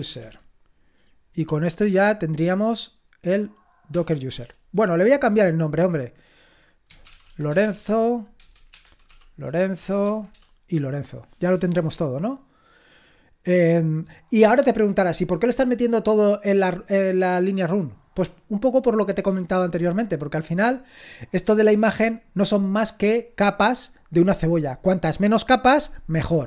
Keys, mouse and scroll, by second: 3.9 Escape, 4.4-10.6 typing, 8.4 Return.